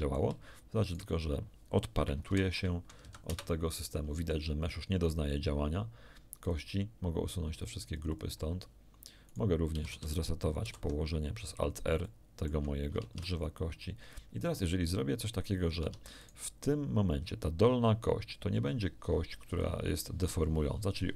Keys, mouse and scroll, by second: 0.8 shift+right click, 2.2 alt+p, 3.0 Down, 3.2 Return, 6.4 click, 7.6 click, 9.2 right click, 9.7 a, 9.8 a, 10.6 alt+r, 11.6 alt+shift+middle click, 11.6-11.9 alt+scroll down 1, 12.0 shift+click, 13.0 ctrl+shift+Tab, 15.8 Tab, 16.2 right click, 19.4 click.